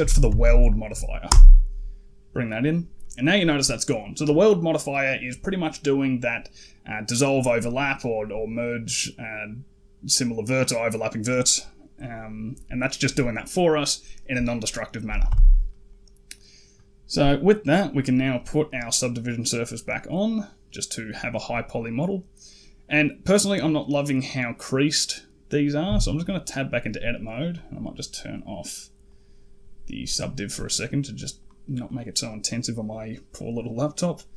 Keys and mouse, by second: 2.8 middle click, 15.1 n, 15.5 middle drag, 18.7-19.1 drag, 19.1 middle drag, 20.2 middle drag, 22.3 middle click, 25.7 Tab, 28.0 click, 29.9 click, 31.2 right click, 31.7 middle click.